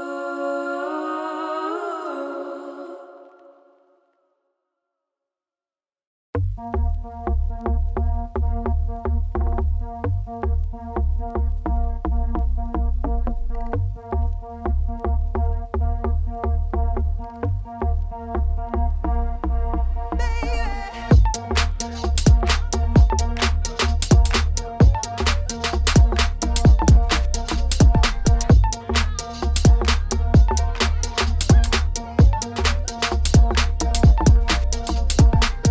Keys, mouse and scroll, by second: 0.0 click, 0.3 x, 0.8 alt+click, 1.7-2.3 scroll up 9, 1.9 shift+middle click, 2.5 shift+middle click, 2.9-3.4 scroll down 1, 3.4 alt+click, 3.7 alt+click, 5.1 1, 5.5 Left, 6.8 ctrl+e, 7.0 middle click, 7.2 scroll down 4, 8.6 s, 9.4 ., 9.6 s, 11.3 scroll down 2, 11.6 z, 12.0 z, 12.4 Tab, 12.6-13.7 middle drag, 13.7 click, 13.8 scroll up 3, 13.8 Tab, 14.7 click, 14.8 middle click, 15.1 shift+click, 15.3 middle click, 15.7 ctrl+KP_Add, 15.8 ctrl+KP_Add, 16.4 s, 18.3 middle click, 18.9 scroll up 3, 19.2 shift+middle click, 19.5 2, 19.9 click, 20.2 shift+s, 20.3 Tab, 20.4-21.6 middle drag, 21.6 shift+a, 23.1 click, 23.4 Tab, 23.5 s, 24.2 s, 25.1 alt+click, 25.3 middle click, 26.1 g, 27.7 middle click, 27.9 Tab, 28.3 right click, 28.6 scroll down 1, 28.8 click, 29.0 middle click, 29.6 click, 29.7 scroll up 3, 30.2-30.5 scroll down 1, 30.5-34.1 drag, 34.1 scroll down 1, 34.2 middle click, 34.9 click, 35.6 shift+click.